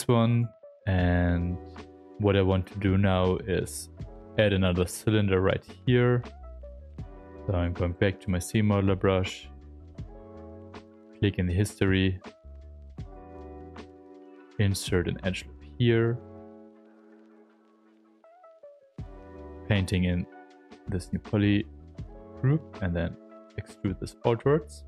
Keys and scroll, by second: 0.8 shift+f, 1.5 shift+f, 6.4-7.6 typing, 12.9 space.